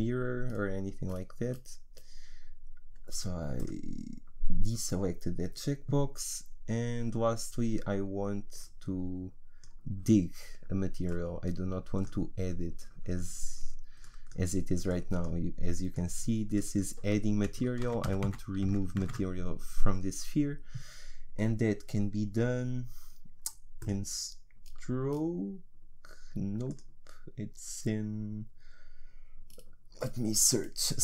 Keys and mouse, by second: 14.0-17.8 drag, 17.8 ctrl+z, 18.1 ctrl+z, 18.2 ctrl+z, 18.7 ctrl+z, 19.0 ctrl+z, 23.8-28.5 drag, 30.0-31.0 middle drag.